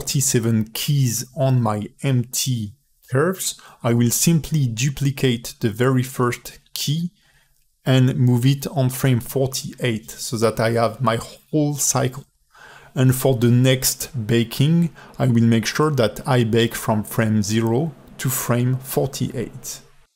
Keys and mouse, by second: 4.0 alt+space, 4.1 alt+shift+middle click, 4.5 ctrl+alt+middle click, 6.0 a, 6.5 ctrl+alt+middle click, 7.1 ctrl+alt+middle click, 7.5 a, 7.6 a, 8.0-9.0 drag, 9.6 shift+d, 11.6 ctrl+alt+middle click, 12.5 space, 13.3 a, 14.9 g.